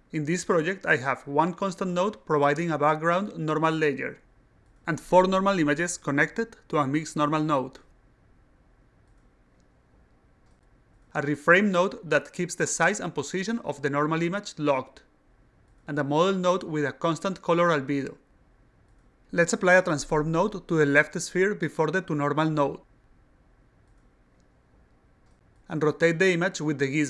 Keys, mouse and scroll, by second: 2.2 click, 2.4 click, 5.7 click, 5.9 click, 6.8 click, 7.0 click, 8.0 click, 8.2 click, 9.2 click, 9.3 click, 10.5 click, 10.7 click, 12.1 click, 12.3 click, 17.0 click, 17.2 click, 20.9 click, 22.6 click, 23.8 click, 24.9 click, 26.2-27.0 drag.